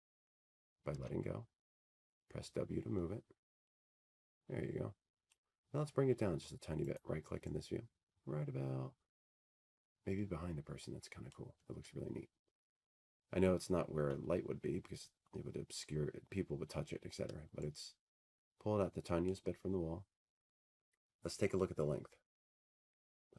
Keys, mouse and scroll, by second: 5.3 click, 6.5 w, 6.6 click, 10.8-13.1 drag, 12.6-14.5 right drag, 16.8-18.2 drag, 18.1 middle click, 19.2 middle click, 20.8 middle click.